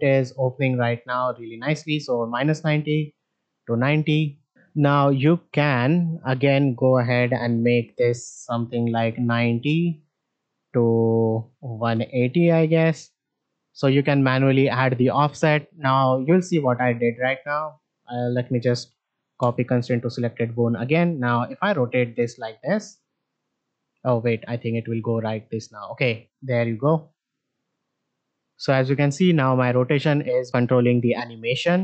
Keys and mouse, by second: 4.9 shift+middle drag, 6.2 click, 7.7-9.5 drag, 10.3-12.6 drag, 15.5 click, 16.2 shift+click, 16.7-17.0 shift+drag, 18.2 F3, 20.4 click, 31.6 middle drag.